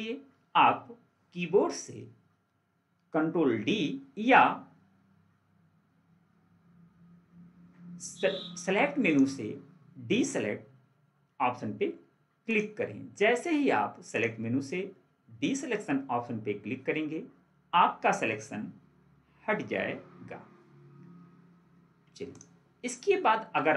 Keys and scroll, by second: 19.7 ctrl+4.